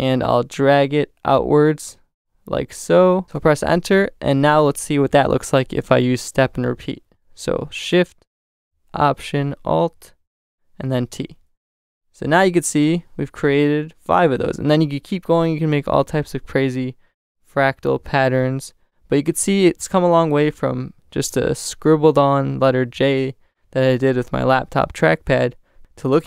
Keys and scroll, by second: 3.3 Return, 11.0 alt+shift+super+t.